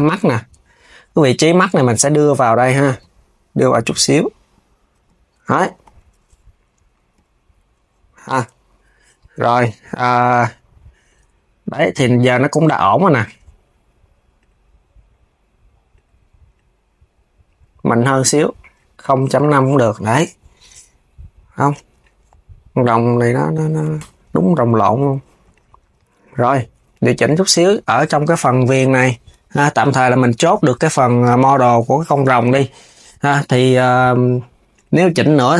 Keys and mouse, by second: 2.4 click, 3.2 click, 5.1 Tab, 5.5 s, 7.2-10.2 right drag, 10.7-19.1 drag, 19.5 KP_1, 21.1 s, 21.6 click, 22.5-24.2 drag, 24.4 s, 25.2 click, 25.5 s, 26.6 click, 27.2 click, 28.0 Tab, 28.4 click, 28.6 KP_3, 29.1 g, 34.4 click, 35.1 s.